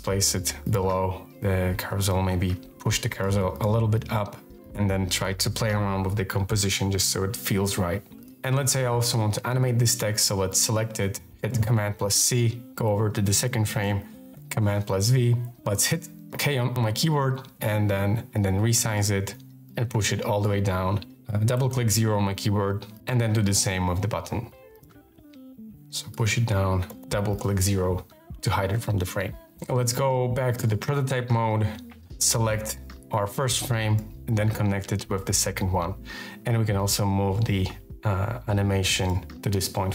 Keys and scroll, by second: 2.1 shift+space, 11.4 super+c, 14.2 super+v, 16.1 k, 19.6 shift+space, 21.3 0, 24.0 super+c, 24.9 super+v, 25.6 shift+space, 26.6 0, 31.8 v.